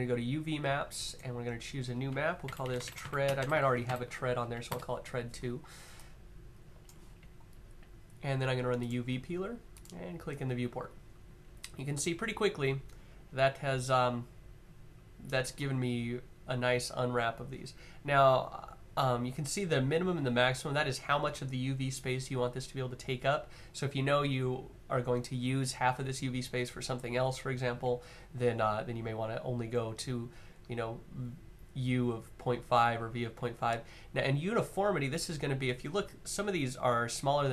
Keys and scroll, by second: 2.2-3.6 typing.